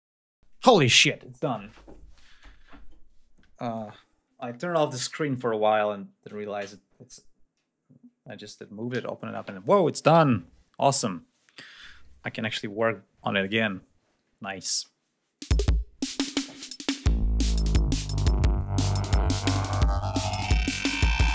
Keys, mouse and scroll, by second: 11.2 scroll up 2, 14.5 click, 15.3 space, 16.4 ctrl+scroll up 2, 17.6 ctrl+scroll down 2.